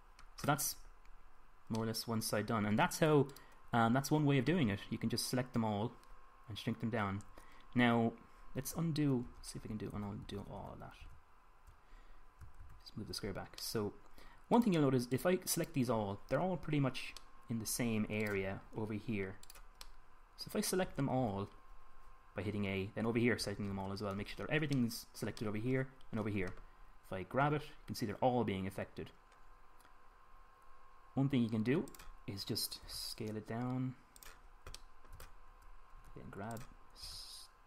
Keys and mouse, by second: 4.1-5.9 drag, 5.9-8.6 middle drag, 10.1 ctrl+z, 10.4 ctrl+z, 10.8 ctrl+z, 11.1 ctrl+z, 11.4 ctrl+z, 11.8 ctrl+z, 13.4 ctrl+z, 18.1 middle click, 19.0-21.7 middle drag, 21.7 a, 22.0 a, 24.2 a, 24.5 a, 25.5-28.2 middle drag, 28.2 g, 32.8-34.7 drag, 33.7 s, 35.0-37.0 drag, 36.8 g, 37.4 click.